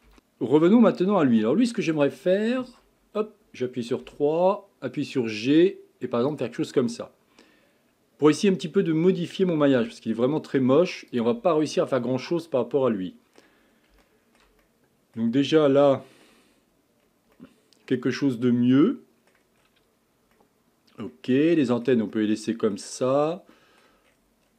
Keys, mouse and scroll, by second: 0.7-2.8 middle drag, 2.8 KP_3, 4.1 g, 6.8-8.6 middle drag, 8.6 scroll up 5, 9.7 g, 11.7 scroll down 2, 12.1-15.4 middle drag, 15.4-15.9 scroll down 4, 15.9 shift+middle click, 16.5-17.4 scroll up 6, 17.4-19.6 middle drag, 19.6-20.4 scroll down 4, 20.4-23.1 middle drag, 23.1 scroll up 5, 23.6 middle click, 24.1-24.5 scroll down 7.